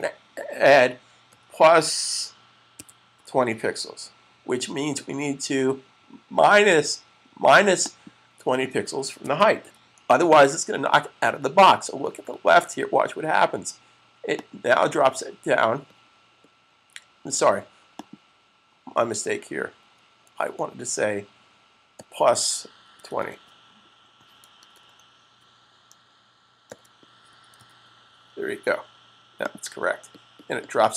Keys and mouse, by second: 1.1 click, 1.1 =, 2.5-3.0 typing, 7.5 click, 8.7-9.4 typing, 8.7 click, 14.1 click, 18.0 click, 21.7-22.9 typing, 24.6 typing, 26.5-27.8 typing, 29.4 click.